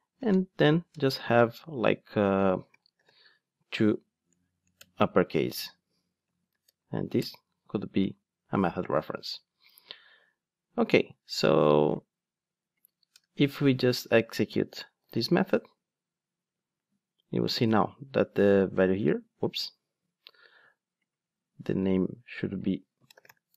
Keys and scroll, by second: 4.7 Return, 6.6 alt+Return, 15.1 ctrl+shift+d.